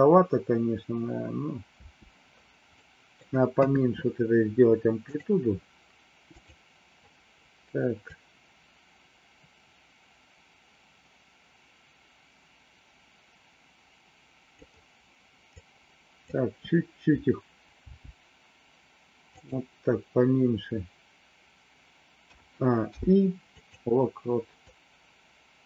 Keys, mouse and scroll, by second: 1.8 space, 2.8 middle click, 3.5 KP_3, 6.4 click, 8.0-14.6 drag, 15.5 click, 17.8 g, 22.3 a, 22.8 i, 24.6-25.6 drag.